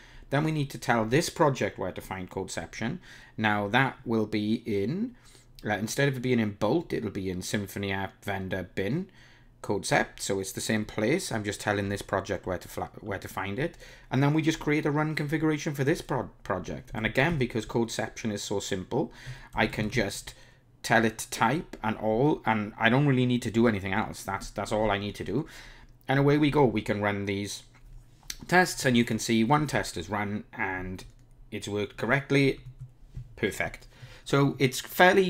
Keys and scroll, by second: 26.3 ctrl+r, 32.7 super+Down.